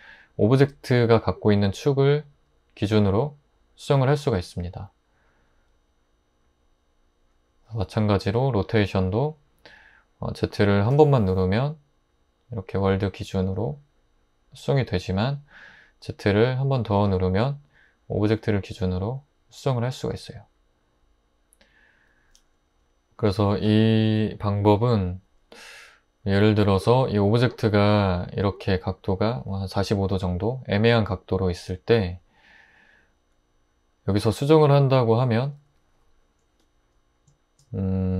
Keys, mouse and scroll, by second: 8.8 r, 10.9 z, 17.0 z, 28.0 r, 35.4 Tab.